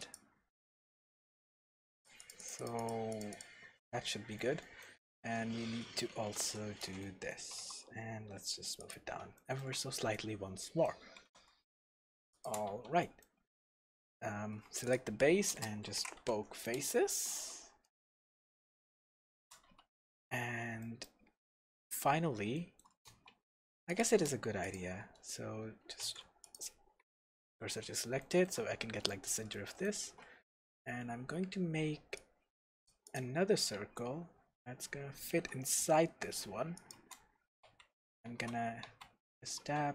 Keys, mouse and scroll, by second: 0.5-1.9 middle drag, 1.9-3.7 drag, 4.1-8.9 shift+middle drag, 5.3 ctrl+1, 5.9 ctrl+2, 6.4 ctrl+3, 7.5 g, 8.9 click, 9.4-12.4 shift+middle drag, 11.2 g, 12.4 shift+click, 12.7 Tab, 13.0-14.8 middle drag, 14.5 alt+a, 14.8 click, 15.5 space, 16.8 Return, 17.3 Tab, 17.8-23.9 middle drag, 18.3-18.8 scroll down 2, 18.8-19.2 scroll up 1, 19.7 Tab, 20.1 scroll up 1, 23.1 alt+a, 23.9 click, 24.6 alt+shift+click, 26.0 shift+s, 27.3 Tab, 28.2-36.1 shift+middle drag, 30.0 shift+a, 33.7 s, 36.9 shift+click, 37.6 f, 38.3 Tab, 38.8 f, 39.6 Tab.